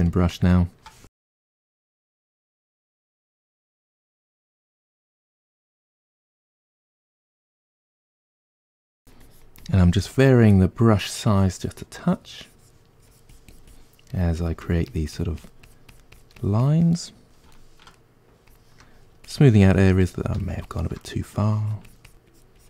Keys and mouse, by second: 1.0-2.2 drag, 2.2 middle click, 2.4 click, 2.9 middle click, 3.1 click, 3.5 middle click, 3.7-9.5 drag, 8.4 f, 9.5 middle click, 9.8-12.5 drag, 12.5-13.7 ctrl+middle drag, 13.7-15.0 shift+drag, 15.0 middle click, 15.2 shift+click, 15.8 middle click, 16.0 shift+click, 16.2 middle click, 16.5 click, 16.7 middle click, 16.9 click, 17.2 middle click, 17.4 click, 17.8-19.5 middle drag, 19.5 click, 19.8 middle click, 20.0-21.6 drag, 21.6-22.6 ctrl+middle drag.